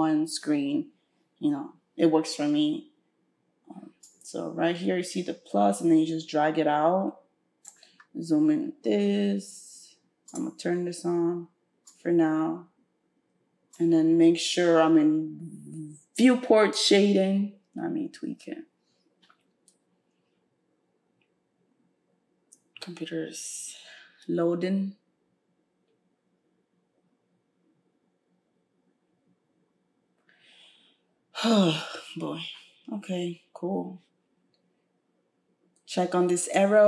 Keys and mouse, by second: 11.9-32.0 drag, 36.5-36.8 drag.